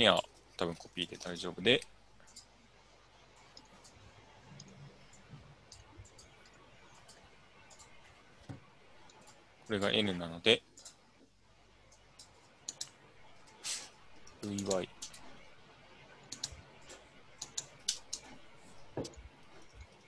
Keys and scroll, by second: 0.9 ctrl+c, 1.2 ctrl+v, 13.4-15.0 typing, 17.7 BackSpace, 17.9 BackSpace, 18.2 Tab, 19.1-20.0 typing, 19.5 Tab.